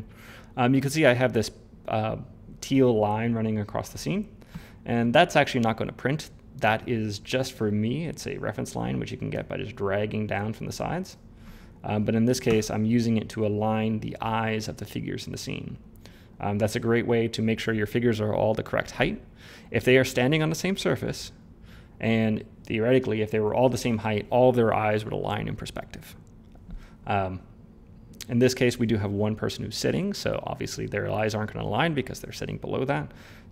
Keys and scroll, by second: 12.2 ctrl+z.